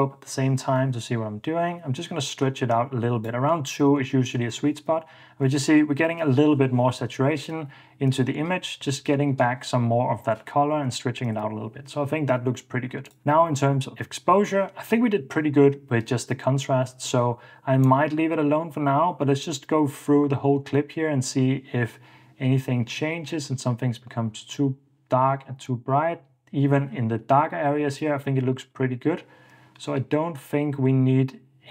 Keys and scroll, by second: 4.6 super+d, 5.7 super+d, 10.8 Return, 11.5 super+s.